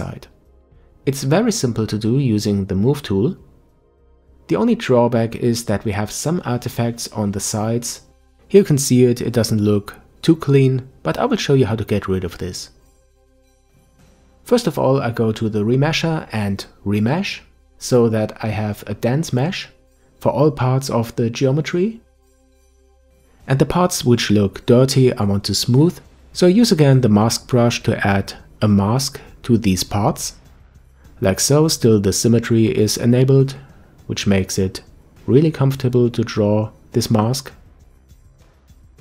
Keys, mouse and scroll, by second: 7.5 ctrl+m, 9.0-9.7 scroll up 1, 18.5-20.8 middle drag, 22.2-23.1 scroll down 1, 23.1-25.1 drag, 26.6 click, 27.1 alt+m, 27.2-28.7 drag, 29.1 middle click, 29.9-30.9 drag, 30.9 middle click, 31.6-33.0 drag, 33.0 middle click, 33.6-35.1 drag, 35.9 middle click, 36.3-37.8 drag.